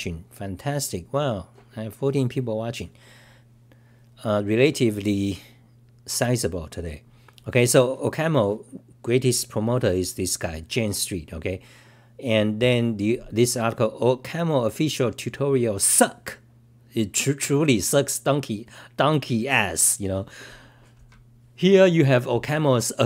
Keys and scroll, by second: 0.0-0.5 typing, 5.6-6.4 typing, 13.6-14.3 typing.